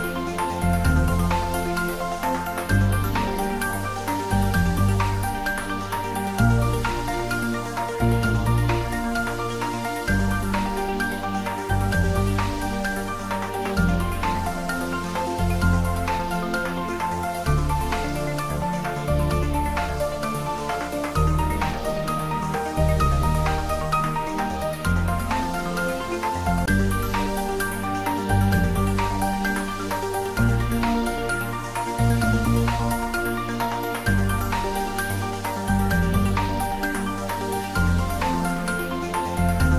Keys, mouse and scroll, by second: 2.2-5.8 drag, 8.0-11.5 drag, 13.6 click, 14.8-18.0 drag, 19.4-23.1 drag, 24.8-32.8 drag, 32.8 scroll down 1, 33.9-35.7 middle drag, 35.7 scroll down 1, 38.6 click.